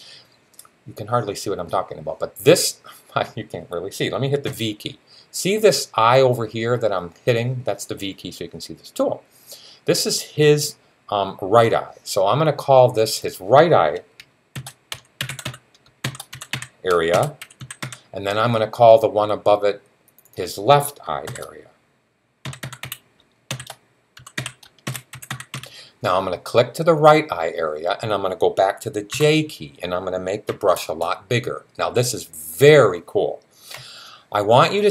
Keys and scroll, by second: 4.3 v, 14.1-18.1 typing, 21.1-25.9 typing, 28.9 typing, 30.3-31.7 typing.